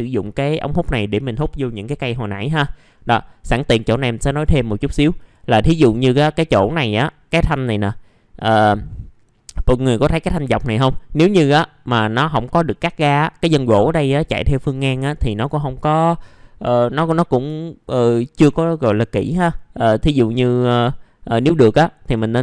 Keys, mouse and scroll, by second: 2.3-3.5 scroll up 1, 3.5 middle click, 4.3 click, 4.8-5.2 scroll down 1, 5.2 click, 5.6-6.6 scroll up 2, 6.6 click, 8.3 ctrl+click, 9.6-11.1 scroll down 1, 12.0-13.1 scroll up 1, 17.6 alt+middle click, 19.0 alt+middle click, 20.6 alt+middle click.